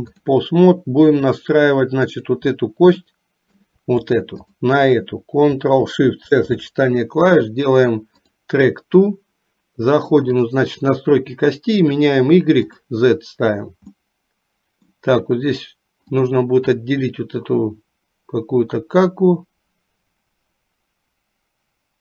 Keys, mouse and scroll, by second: 2.2 click, 3.2 shift+middle click, 10.6 click, 12.0 click, 12.9 click, 14.2 middle click, 17.0-22.0 middle drag.